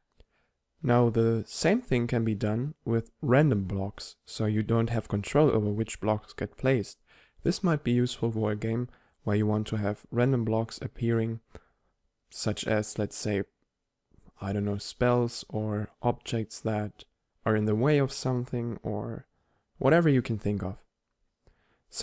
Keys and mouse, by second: 0.1 click, 0.2 click.